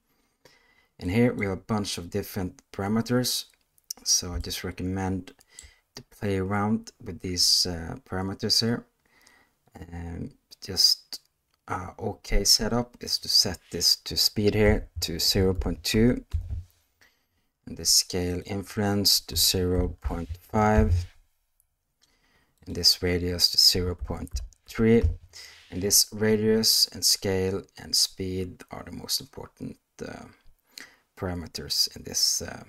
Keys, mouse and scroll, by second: 1.0 click, 4.4-5.5 shift+middle drag, 13.0-16.2 drag, 18.4-20.7 drag, 22.5-25.0 drag, 29.0 middle click.